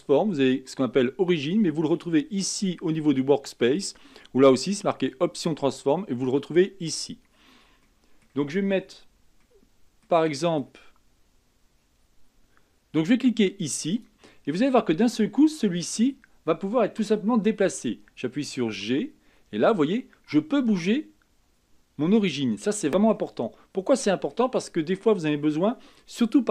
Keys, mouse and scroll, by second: 2.5 click, 7.8-13.3 middle drag, 13.9 click, 14.5-15.2 middle drag, 15.2-16.2 scroll up 4, 18.7 g, 22.6-23.2 scroll down 3, 23.2-26.3 middle drag.